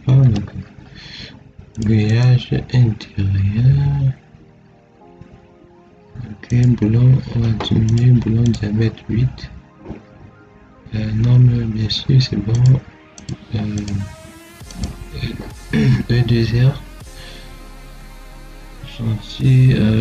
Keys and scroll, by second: 0.1 1.